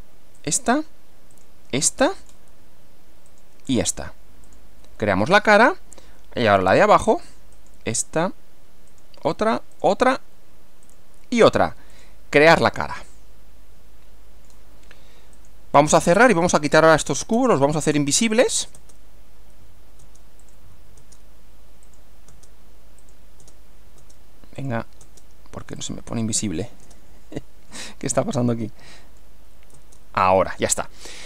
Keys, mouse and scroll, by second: 0.4 ctrl+click, 1.3 ctrl+click, 1.8-2.5 ctrl+middle drag, 3.3 ctrl+click, 4.5 click, 5.3-6.7 middle drag, 7.5 click, 8.9 ctrl+click, 9.7 ctrl+click, 10.9 ctrl+click, 11.9 click, 12.7-14.7 middle drag, 15.3 click, 16.5 click, 17.3 space, 18.2 click, 18.7 space, 20.0 space, 20.4 click, 20.9 space, 21.9 click, 22.3 space, 23.0 click, 23.4 space, 24.6 click, 24.6 space, 25.0 space, 25.8 click, 26.8 space, 28.1-29.4 middle drag, 29.7 space, 30.7-31.2 middle drag.